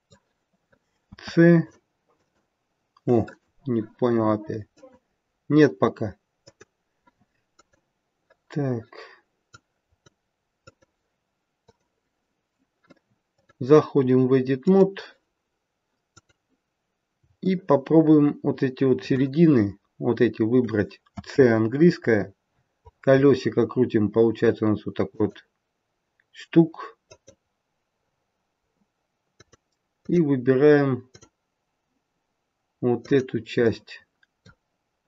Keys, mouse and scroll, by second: 0.9 c, 4.7 click, 7.5 click, 9.5 click, 10.4 click, 11.5 click, 13.3 click, 16.1 click, 17.4 shift+middle click, 19.5-20.4 scroll up 1, 21.0 c.